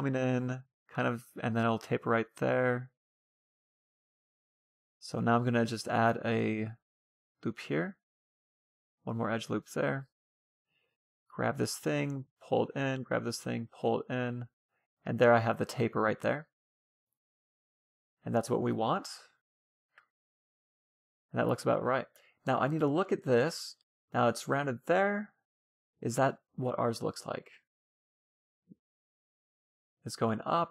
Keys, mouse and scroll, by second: 0.6-3.6 middle drag, 4.4 ctrl+r, 7.4 ctrl+r, 9.2-11.1 middle drag, 9.7 a, 9.9 c, 11.1-12.5 drag, 11.8 a, 11.9 c, 12.7-14.2 right drag, 12.9-14.6 drag, 14.0 a, 15.6-17.2 middle drag, 17.2-18.8 scroll up 1, 18.8-20.3 middle drag, 20.5-21.0 scroll up 1, 21.0-23.4 middle drag, 24.9-29.1 middle drag.